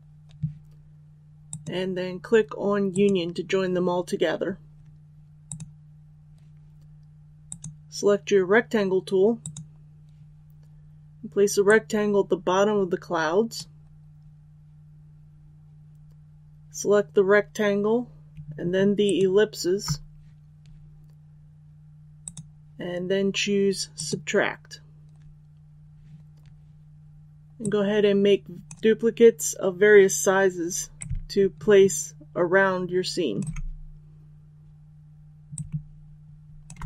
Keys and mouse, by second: 18.9 shift+click, 22.1-33.3 drag, 35.4 click.